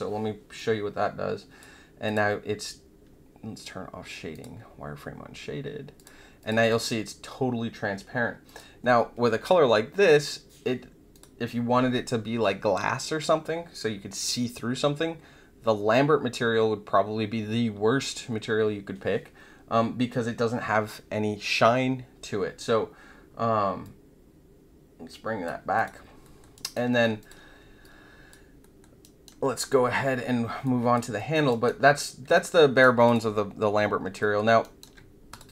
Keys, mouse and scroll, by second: 0.5-1.5 drag, 2.0 click, 4.3 click, 5.9 click, 6.4 click, 6.6 click, 8.4 click, 11.1 click, 23.8-25.4 drag, 25.7 click, 26.2 alt+middle click, 26.5 alt+right click, 27.1 click, 27.8 alt+click, 28.6 alt+middle click, 29.0 alt+right click, 30.6 alt+click, 31.1 alt+middle click, 32.3-33.0 right drag, 33.0 click, 34.1 alt+middle click, 34.6 alt+right click, 35.3 click.